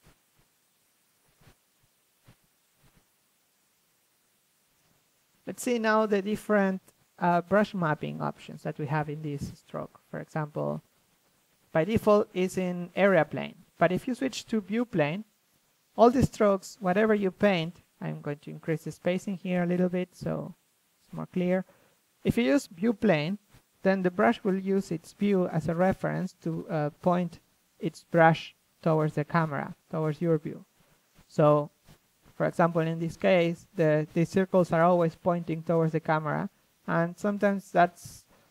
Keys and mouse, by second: 0.0-3.9 drag, 4.0-7.7 drag, 7.7 ctrl+z, 8.2 f, 8.2 click, 9.1 f, 9.4-11.0 drag, 10.9 ctrl+z, 11.0 ctrl+z, 11.3 ctrl+z, 15.1-19.2 drag, 23.8-24.8 drag, 25.9 click, 26.7 ctrl+z, 27.4-30.4 drag, 31.7 click, 33.6-34.6 drag.